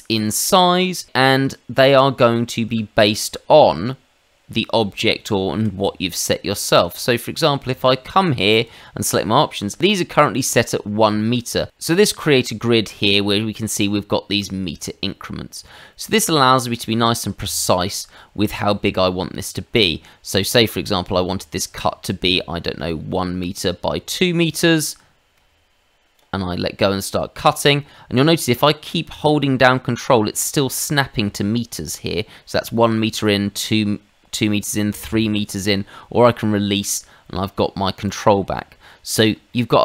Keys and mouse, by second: 6.9 click, 7.7 click, 8.5 click, 22.9 ctrl+click, 24.5 click, 38.0 click, 38.5 middle click, 39.5 shift+middle click.